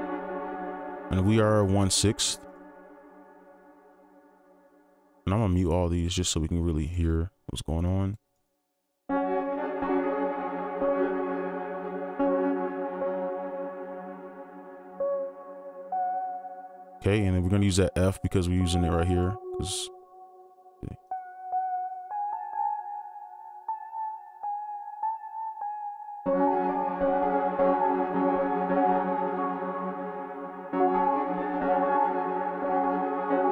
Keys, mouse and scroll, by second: 2.5 right click, 5.5 double click, 9.5 space, 13.0 alt+click, 16.3-16.8 scroll up 1, 18.7 double click, 21.5 double click, 24.7 right click, 26.2 space, 26.7 space, 33.1 right click, 33.1 space.